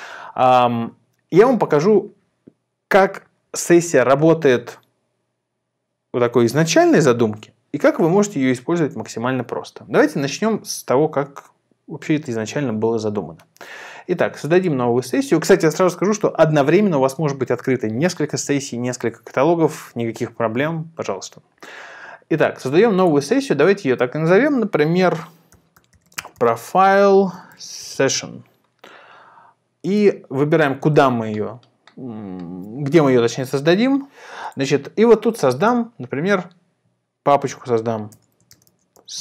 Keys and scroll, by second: 25.3-28.5 typing, 37.4-39.2 typing.